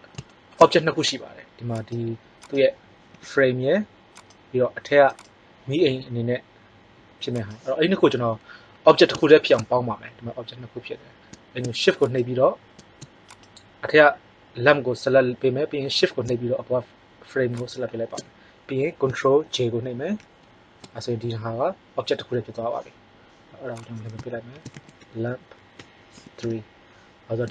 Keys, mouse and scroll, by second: 1.7-3.4 right drag, 3.0 g, 3.4-4.4 drag, 5.0-5.7 right drag, 5.8 g, 17.5-19.8 drag, 20.1 ctrl+j, 23.7-26.3 drag, 27.3 middle click.